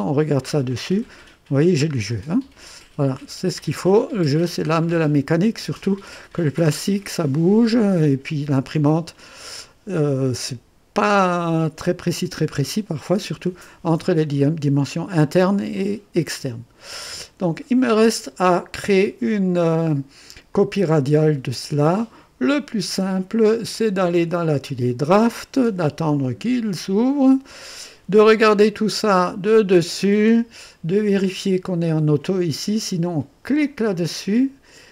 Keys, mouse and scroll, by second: 1.2 right click, 1.9 scroll up 1, 2.1 typing, 3.9-4.7 scroll down 2, 5.3-6.1 drag, 6.6 scroll down 1, 7.1-8.9 drag, 12.7-13.5 drag, 15.7-17.2 drag, 19.6 click, 20.5 click, 23.7 click, 24.7 click, 29.4 click, 30.3-31.3 scroll down 2, 33.6 click.